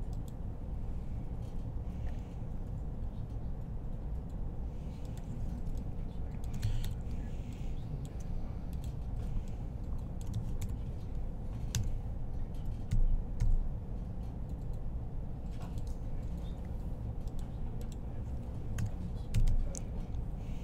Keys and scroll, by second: 2.4 g, 6.6 1, 10.4 typing, 11.5 typing, 12.7-13.2 typing, 16.0-16.8 typing, 18.6-19.8 typing.